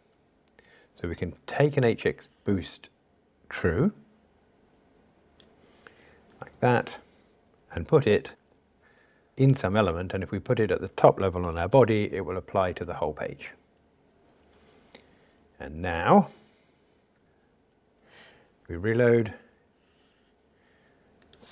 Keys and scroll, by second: 12.0 super+v.